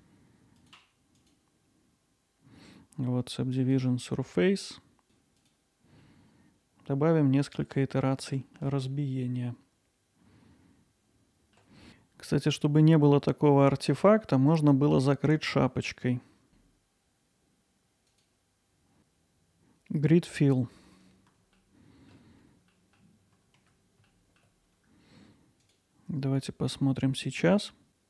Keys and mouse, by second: 6.0-8.1 alt+middle drag, 18.1-21.4 drag, 21.6 alt+middle click, 22.7 middle click, 23.6 Tab, 24.1 alt+middle click, 27.9-28.0 drag.